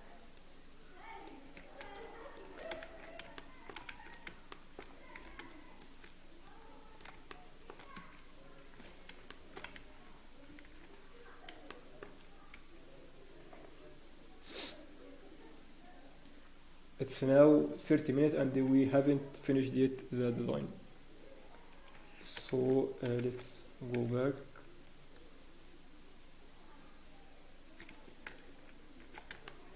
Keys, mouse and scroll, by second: 2.5 shift+click, 2.8 shift+z, 3.3 shift+middle click, 3.9 shift+z, 4.5 shift+middle click, 5.4 c, 8.9 Escape, 8.9 scroll down 1, 9.3 shift+middle click, 9.8 ctrl+s, 9.8 scroll down 2, 21.2 Escape, 21.2 shift+middle click, 21.2-21.9 scroll up 1, 22.5 shift+z, 23.9 c, 28.4 shift+z, 29.4 shift+middle click.